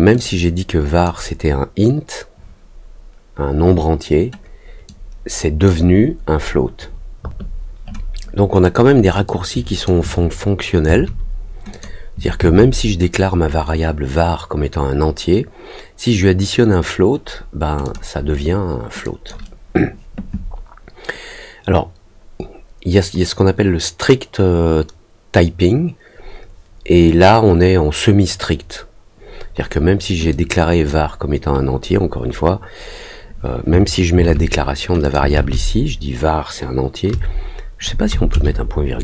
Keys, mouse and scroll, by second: 0.1 click, 4.8 click, 8.6 click, 9.2 click, 11.7 click, 17.8 click, 19.0 click, 30.2 click, 35.0 click.